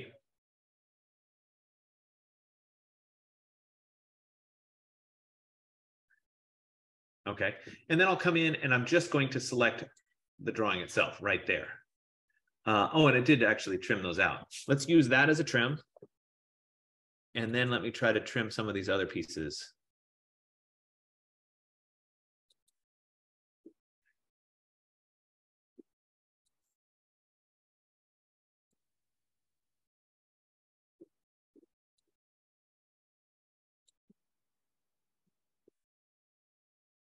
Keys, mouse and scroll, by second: 10.1-15.2 drag, 15.4-16.6 typing, 17.9-22.8 drag, 26.8-32.2 drag, 33.9-37.1 drag.